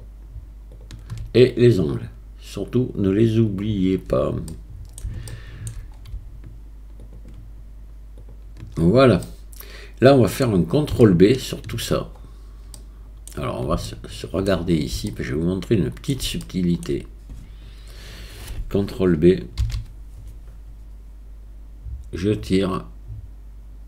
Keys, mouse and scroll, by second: 4.5 middle click, 5.3 shift+middle click, 7.1-8.8 shift+middle drag, 9.3 middle click, 10.1 middle click, 11.0 shift+middle click, 12.8 middle click, 13.9 shift+middle click, 15.1-16.1 shift+middle drag, 16.4 shift+middle click, 19.6 ctrl+b.